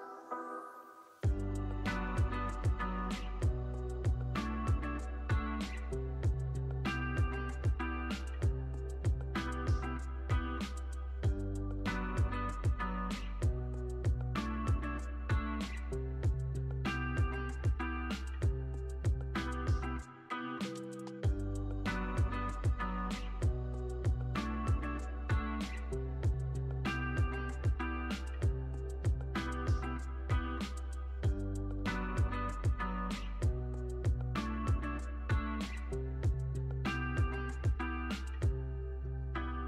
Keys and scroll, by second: 6.7 u, 7.7 x, 19.1-20.0 typing, 25.2 super+c, 25.4 super+v.